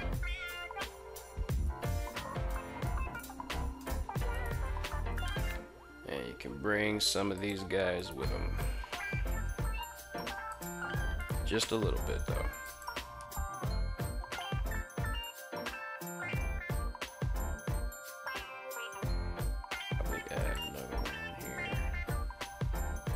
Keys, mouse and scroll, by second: 1.1 Tab, 3.8 alt+right click, 4.6 g, 4.9 g, 6.8 click, 7.3 alt+right click, 8.0 g, 8.3 g, 10.0 click, 10.6 alt+right click, 11.4 g, 12.2 click, 12.9 Tab, 13.3-15.7 middle drag, 16.8-17.2 middle drag, 18.3 Tab, 19.4 ctrl+r.